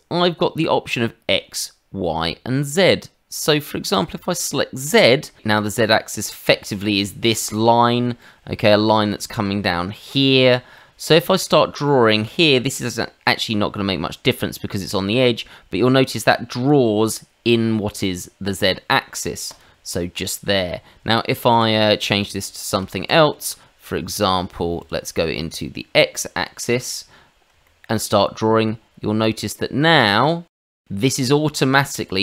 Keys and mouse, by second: 3.9 click, 4.8 middle click, 5.4 middle click, 8.2 middle click, 10.7 middle click, 11.2 shift+middle click, 11.8 middle click, 12.2 shift+middle click, 12.7 middle click, 14.8 click, 19.4 click, 20.0 middle click, 21.5 shift+z, 22.3 shift+z, 22.9 ctrl+z, 24.8 click, 26.8 click, 27.6 shift+middle click, 29.2 click, 32.0 click.